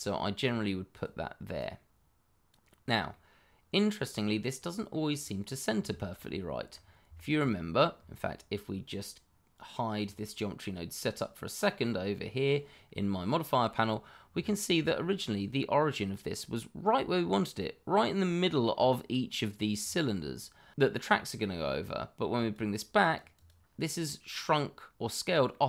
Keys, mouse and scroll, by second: 1.1 click, 2.6-3.1 scroll down 1, 3.1 middle click, 5.1 click, 5.6-5.9 scroll down 1, 5.9 shift+middle click, 6.7-7.0 scroll up 1, 7.1 shift+middle click, 7.7 scroll up 1, 9.9 click, 13.8-14.3 scroll up 1, 14.5 shift+middle click, 14.5 middle click, 14.6 shift+middle click, 18.7-19.3 scroll up 1, 19.7-20.7 scroll down 1, 22.3 click, 23.4 double click, 25.5 middle click.